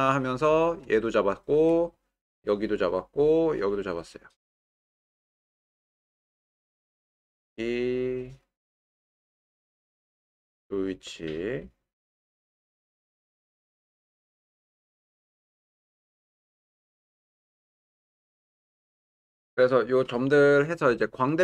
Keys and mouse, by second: 0.0 click, 1.1 shift+click, 2.7 shift+click, 3.7 shift+click, 8.4 click, 9.6 click, 10.6 click, 12.1 click, 13.7-14.8 drag, 15.1-16.2 drag.